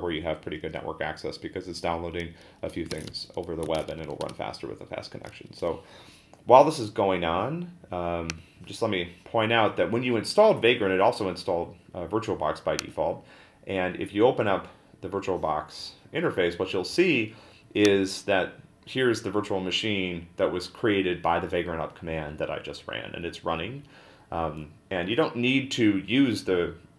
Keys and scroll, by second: 2.9 ctrl+a, 3.1 n, 3.7 ctrl+l, 4.2 Return.